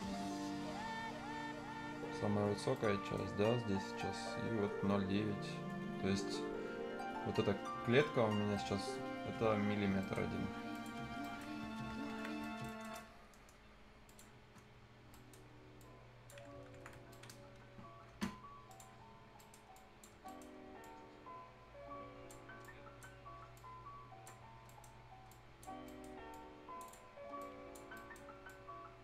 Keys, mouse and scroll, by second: 0.0-0.5 scroll up 1, 2.5 scroll up 1, 2.7 right click, 3.3-3.9 scroll up 1, 5.2 scroll down 1, 6.6 scroll up 1, 9.8 scroll up 1, 10.0 right click, 10.7 click, 11.0 scroll down 1, 11.2 right click, 11.5-11.8 scroll up 1, 11.9 Escape, 12.3 scroll down 1, 12.4 right click, 14.0 click, 14.3 scroll down 1, 15.1 middle click, 15.8 click, 16.4 scroll down 1, 17.1 right click, 18.6 click, 18.9-19.3 scroll up 1, 19.3 right click, 19.7 click, 20.1 scroll down 1, 20.2 right click, 20.8-23.2 drag, 23.2-23.5 scroll up 1, 23.5 click, 24.4 scroll down 1, 24.6 right click, 24.9-25.3 scroll up 1, 25.3 click, 25.7 scroll up 1, 25.8 right click, 26.3 click, 27.8 scroll up 1, 27.9 right click, 28.4 click.